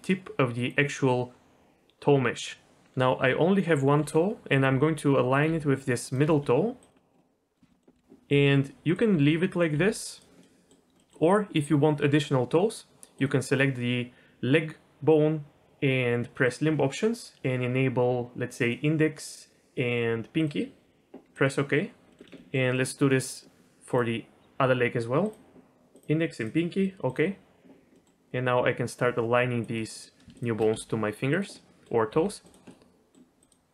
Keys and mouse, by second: 4.0 r, 4.7 s, 5.5 g, 6.2 s, 6.9 middle click, 7.2 middle click, 7.3 click, 7.7 click, 7.9 KP_3, 8.3 g, 9.1 r, 9.7 g, 10.6 middle click, 11.0 middle click, 16.5-21.5 drag, 22.1 middle click, 22.3 shift+middle drag, 22.7 middle click, 23.2 middle click, 23.9 click, 25.3-27.3 drag, 27.9 middle click, 28.9 click, 29.9 middle click, 30.3 shift+click, 30.7 s, 31.7 middle click, 32.1 g, 32.8 middle click.